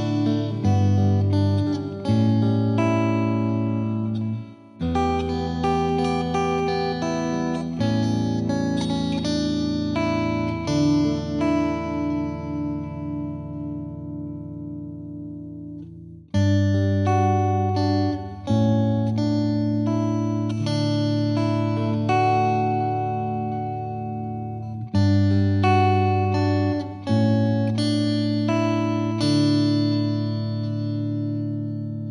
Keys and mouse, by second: 0.0 click, 2.3 click, 10.6 click, 11.5 Delete, 15.1 click, 16.8 click, 19.7 click, 20.3 click, 22.8 click, 24.7 click, 26.6 click, 28.8 click, 30.6 click.